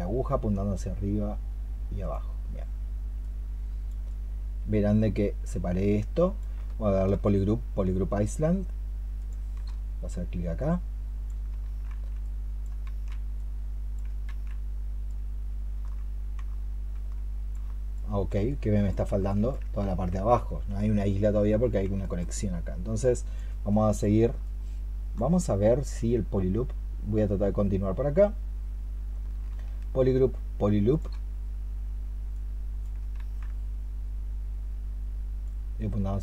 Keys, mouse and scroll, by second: 7.0-9.4 space, 11.3 space, 11.5 ctrl+z, 12.7 ctrl+z, 17.8 alt+click, 19.1 alt+click, 19.7 ctrl+z, 21.9 alt+click, 23.6 alt+click, 29.4-30.9 space, 33.0 ctrl+z.